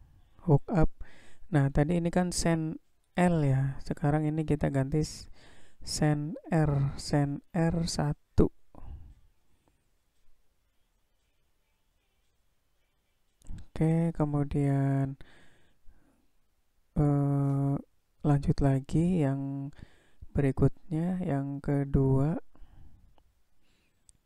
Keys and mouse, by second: 0.5-5.1 drag, 6.2-13.3 drag, 17.1-18.3 drag, 21.6 click.